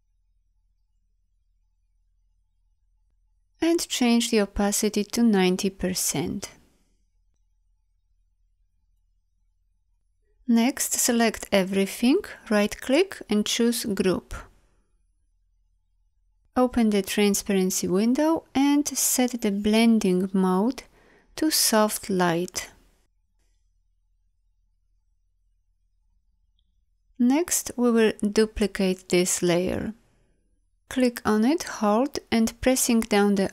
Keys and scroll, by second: 11.4 ctrl+a.